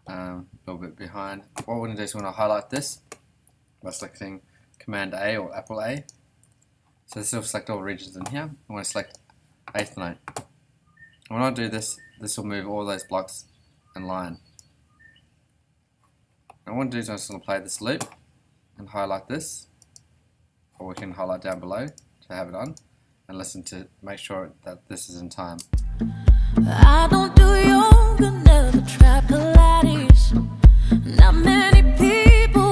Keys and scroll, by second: 6.4 super+a, 25.6 space.